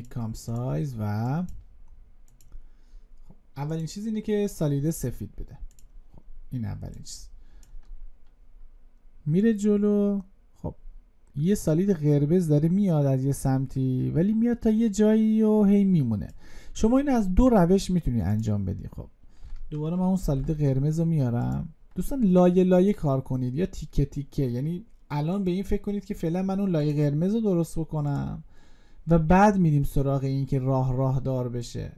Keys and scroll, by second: 20.0 ctrl+y.